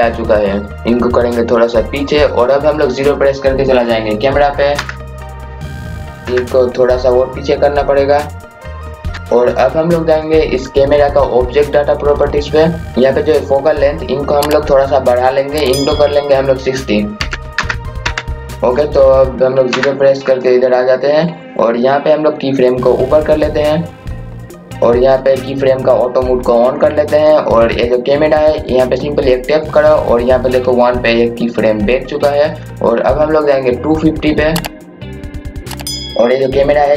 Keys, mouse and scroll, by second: 0.3 scroll down 1, 1.3 click, 4.8 KP_0, 5.5 scroll up 1, 5.8-6.2 scroll down 1, 6.2 KP_0, 8.2 click, 9.1 KP_0, 12.2 click, 12.9 KP_0, 15.1 click, 18.5 KP_0, 20.9 scroll down 1, 21.4 scroll up 1, 22.8-24.6 drag, 27.5 click, 32.7 click, 35.3 scroll down 1, 35.7 click, 36.1 scroll up 1.